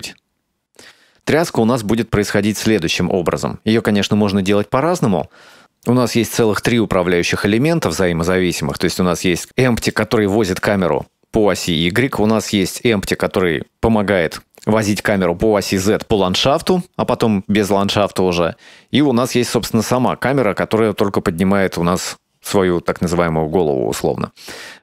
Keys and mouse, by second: 3.6-4.0 shift+middle drag, 7.5 right click, 9.4-10.0 middle drag, 12.7 right click, 20.0 right click.